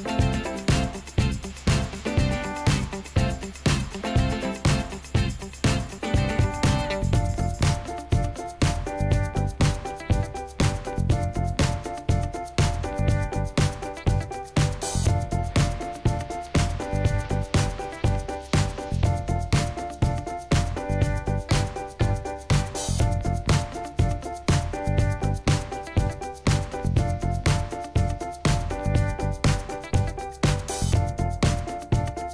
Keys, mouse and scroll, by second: 12.9 scroll up 1, 13.4 middle click, 14.9 scroll down 1, 15.7-16.1 scroll up 1, 16.1 middle click.